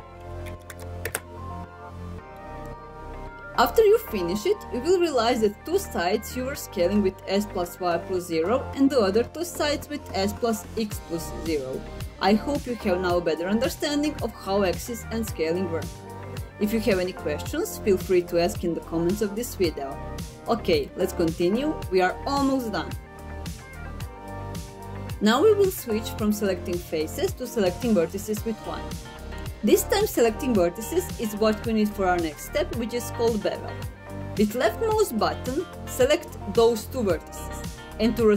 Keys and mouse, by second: 0.2 x, 0.4 KP_0, 0.8 KP_Enter, 2.2 middle click, 27.9 1, 29.4-30.7 middle drag, 36.3 right click.